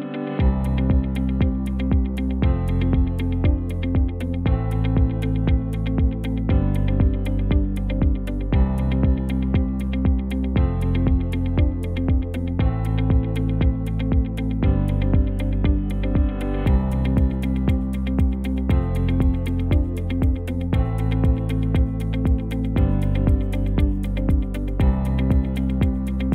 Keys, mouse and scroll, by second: 8.8 Tab, 13.2 ctrl+t, 16.5 alt+s, 18.1 Tab, 18.8 KP_0, 19.8 space, 20.5 space, 21.6 ctrl+s.